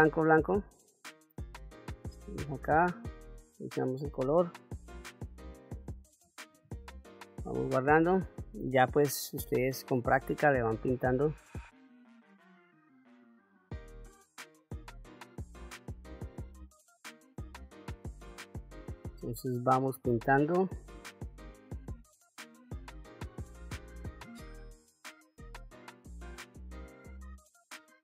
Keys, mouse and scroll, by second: 1.9-3.6 drag, 4.5 click, 6.3 ctrl+s, 10.1 click, 12.6 click, 12.9 click, 13.3 ctrl+f, 14.4 ctrl+f, 15.1-16.1 drag, 17.7 click, 20.0 click, 21.3 f, 21.4 click, 22.0 middle click, 22.2-23.8 drag, 24.1 click, 24.6 f, 24.7-26.4 drag, 26.7 click, 27.0 click, 27.4 f, 27.6-28.0 drag.